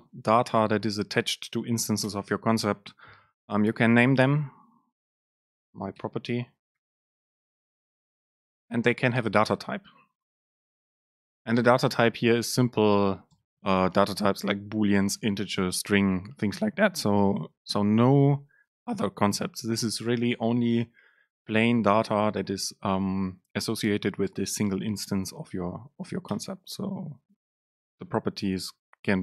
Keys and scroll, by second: 2.1 Down, 2.3 Return, 6.1 BackSpace, 11.1 BackSpace, 11.2 super+space.